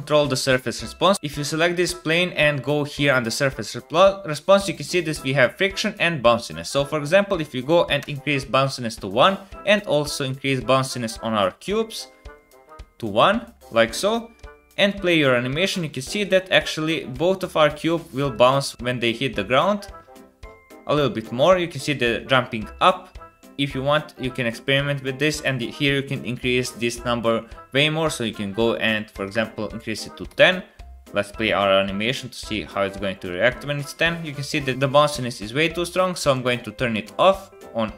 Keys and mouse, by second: 2.8-9.7 drag, 10.8-12.8 drag, 16.3-17.4 drag, 17.4 space, 18.7 space, 23.6 space, 30.5 space, 34.0 click, 34.2 click, 34.6 space, 36.7 middle click, 37.4 click.